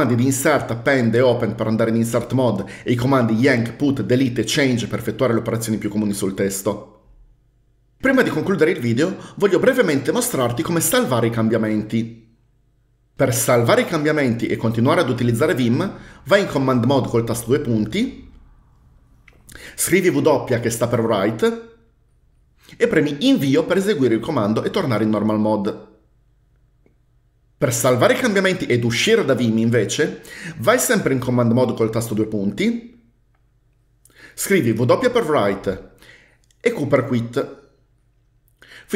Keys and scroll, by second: 17.4 shift+;, 20.8 typing, 23.4 Return, 31.6 typing, 35.0 w, 37.0 typing.